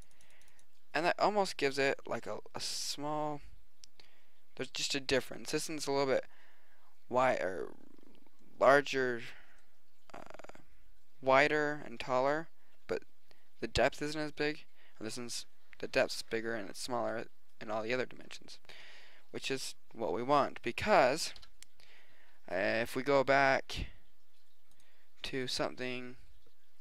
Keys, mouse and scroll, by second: 1.8-4.0 middle drag, 6.4 middle click, 8.8 middle click, 9.8-11.8 middle drag, 21.3 KP_1.